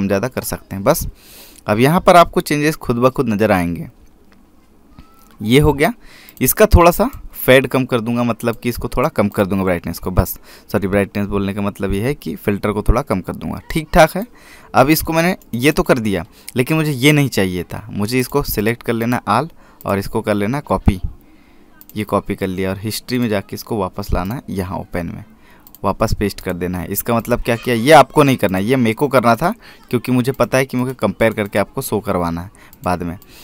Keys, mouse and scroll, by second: 0.1 click, 7.1 click, 15.0 click, 16.2 right click, 16.5 click, 19.1 click, 22.6 click.